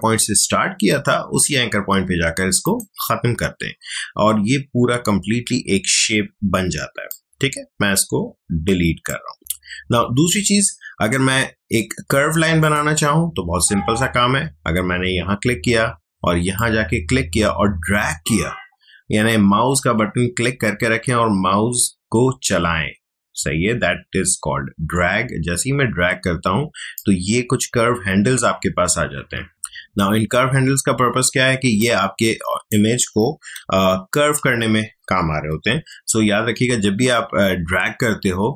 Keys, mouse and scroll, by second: 2.6 click, 7.1-9.4 drag, 12.6 click, 16.5-26.5 drag, 31.8-33.6 drag, 33.6 ctrl+z, 37.4 ctrl+alt+z.